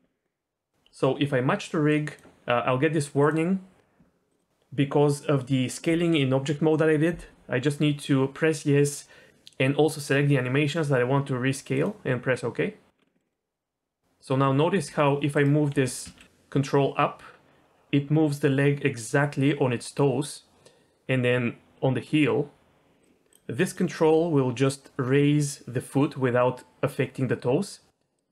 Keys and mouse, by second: 0.7-12.6 drag, 13.0 middle click, 13.1 middle click, 13.2 middle click, 14.3 middle click, 14.7 g, 15.3 right click, 15.7 g, 16.1 z, 23.3 click, 23.6 middle click, 24.0 r.